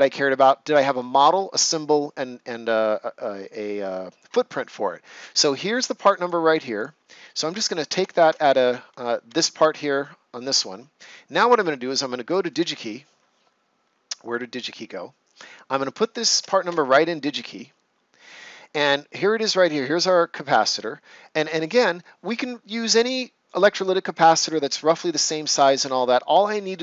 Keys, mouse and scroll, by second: 6.2-9.2 drag, 8.2 ctrl+c, 9.2 Escape, 14.6 click, 16.6 Return.